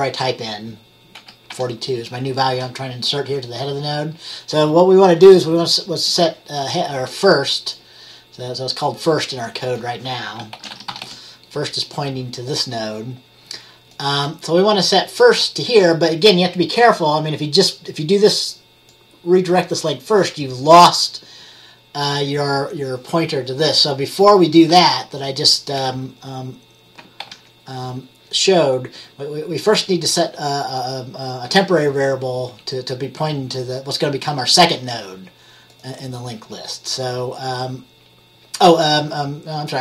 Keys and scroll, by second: 1.0-2.1 typing, 10.4-11.7 typing, 27.3 ctrl+z.